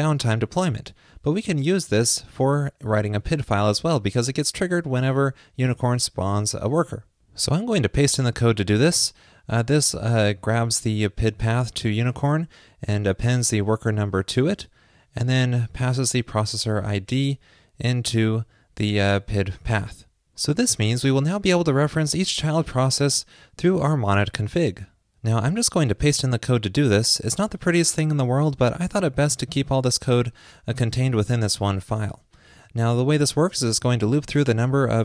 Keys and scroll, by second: 8.7 super+v, 26.2 super+v.